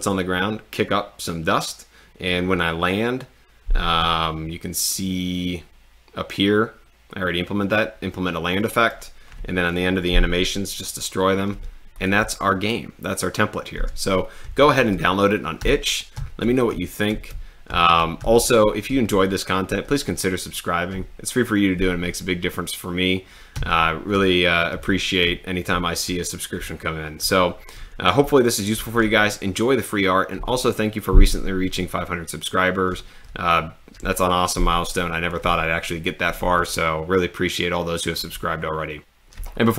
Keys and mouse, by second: 14.3-18.8 typing, 23.3-25.7 typing, 26.7 a, 28.3 a, 28.8 w.